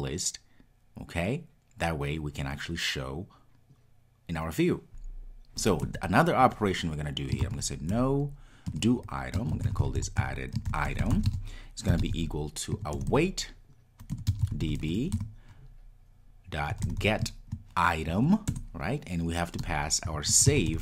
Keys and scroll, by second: 8.8 Return, 14.2 Return, 18.5 Return.